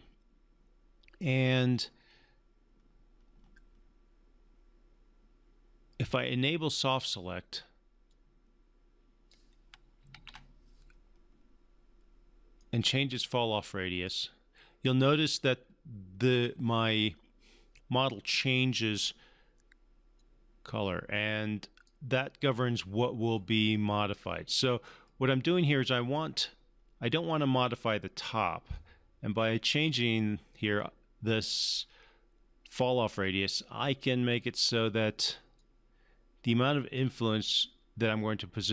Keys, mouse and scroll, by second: 8.1-9.3 drag, 10.1 ctrl+z, 12.6-14.1 drag, 20.2-22.1 drag, 28.7-30.0 drag, 33.4-34.7 drag.